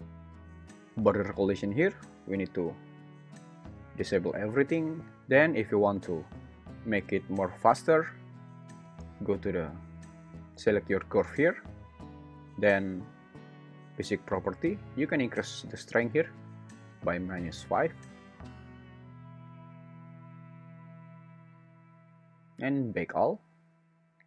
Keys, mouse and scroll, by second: 2.2 click, 6.5 `, 10.3 alt+z, 15.5-18.4 drag.